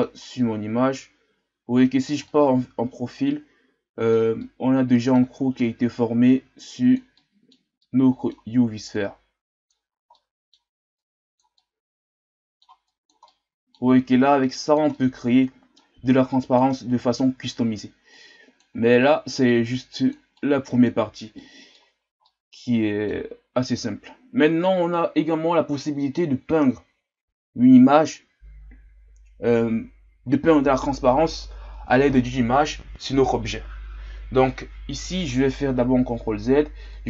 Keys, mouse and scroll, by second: 0.2-0.9 scroll up 1, 0.9-2.2 drag, 2.2-5.6 middle drag, 5.6-7.1 drag, 7.1-8.3 middle drag, 8.3-8.9 scroll up 1, 8.9 click, 9.9 scroll down 1, 10.1 middle click, 10.9 click, 11.5-12.9 middle drag, 12.9 click, 13.2 middle click, 14.1 click, 14.9-16.1 middle drag, 16.1 click, 16.7-18.1 middle drag, 18.1 click, 18.9 middle click, 19.7 click, 20.3-22.0 middle drag, 22.0 scroll down 1, 22.2-23.4 middle drag, 23.4-28.0 scroll up 2.